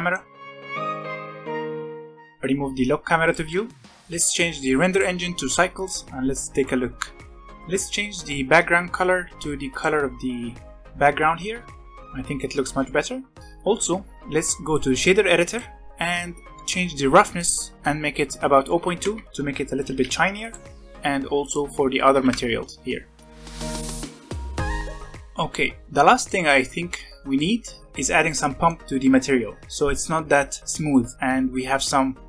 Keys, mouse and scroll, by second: 0.7 scroll down 1, 0.9-1.9 shift+middle drag, 1.9 click, 2.0 n, 2.2 click, 2.3 click, 2.3 n, 3.1 click, 3.4 n, 3.7-4.9 scroll up 5, 4.9-7.5 drag, 9.0 e, 10.8-12.5 scroll down 3, 13.4 click, 14.5-15.8 drag, 15.8-16.2 middle drag, 16.2-17.3 scroll up 1, 17.3-19.8 drag, 19.8 alt+a, 20.4 click, 21.3-23.2 drag, 23.4 click, 23.9 alt+a, 24.6 scroll up 4, 25.3 scroll up 2, 26.3-27.9 middle drag, 27.9 scroll down 7, 28.4-28.8 shift+middle drag, 28.8 scroll up 5.